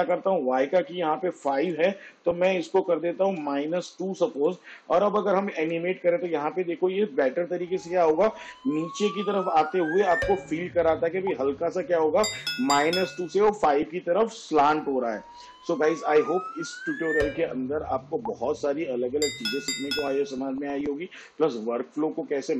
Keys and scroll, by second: 3.8 -, 4.5 2, 6.6 space.